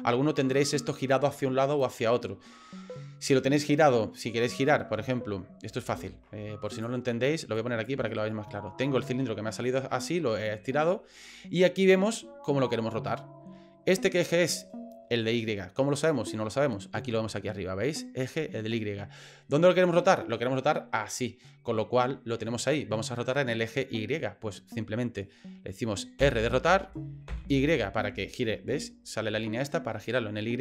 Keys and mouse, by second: 5.9 ctrl+z, 6.8 click, 7.5 click, 8.2 middle click, 8.9 middle click, 9.7 middle click, 11.0 middle click, 26.2 r.